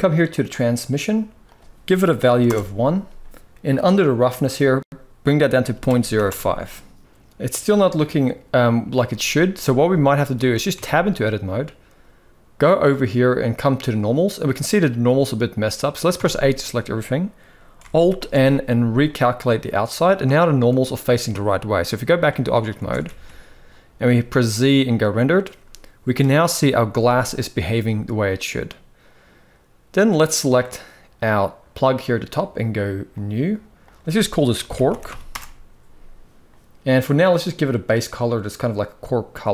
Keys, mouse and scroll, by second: 0.1-2.2 drag, 4.1-6.0 drag, 9.2 z, 10.0 shift+middle click, 10.5 Tab, 12.3-15.1 drag, 15.8 a, 17.8 alt+n, 21.4 click, 22.5 alt+a, 22.7 s, 23.7 z, 30.1 click, 32.8 click, 33.5-35.3 drag, 36.9 click.